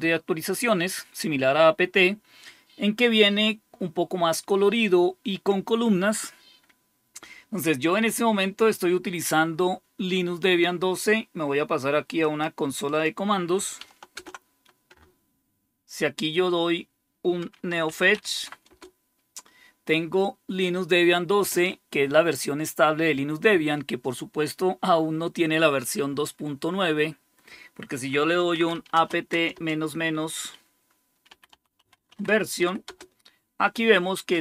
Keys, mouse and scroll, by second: 12.1-14.0 drag, 14.0 super+Return, 17.4-18.5 typing, 18.6 Return, 28.0-29.5 typing, 30.9-33.0 typing.